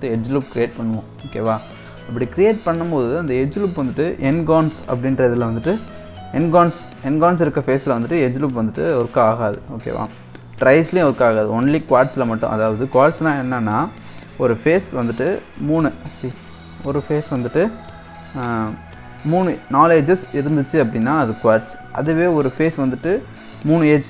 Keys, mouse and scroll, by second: 2.7-3.4 scroll down 2, 8.7-9.2 scroll up 2, 9.2-9.9 scroll up 2, 9.9-11.7 scroll down 1, 11.7-12.0 scroll down 1, 12.0-15.0 middle drag, 15.5-17.0 scroll up 1, 17.0 Tab, 17.3-17.7 scroll up 1, 17.7 middle click, 18.3 click, 22.0 scroll down 1, 22.0-24.0 middle drag.